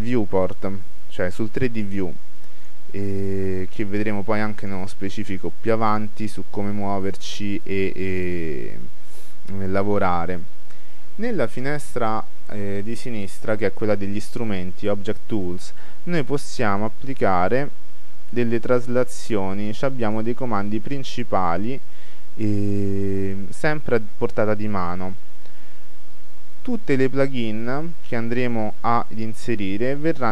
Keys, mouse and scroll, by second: 2.7-7.6 drag, 7.7-9.5 drag, 11.8-13.8 middle drag, 16.9-18.6 drag, 21.3-26.3 middle drag, 21.3-23.4 scroll down 1, 23.4 scroll down 1, 23.7-26.1 scroll up 1, 26.1 scroll up 1, 26.9-29.5 middle drag.